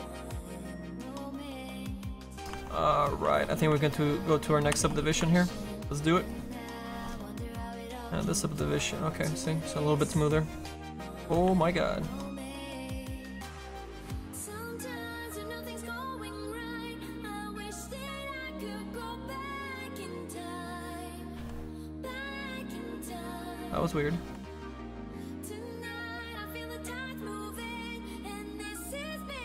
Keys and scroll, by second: 11.2 ctrl+z, 14.9 ctrl+z, 21.4 ctrl+z.